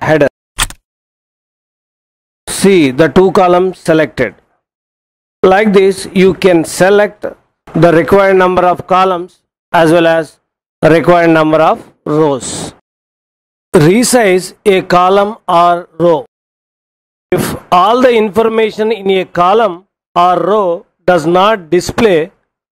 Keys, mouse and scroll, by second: 0.5 shift+click, 5.5 click.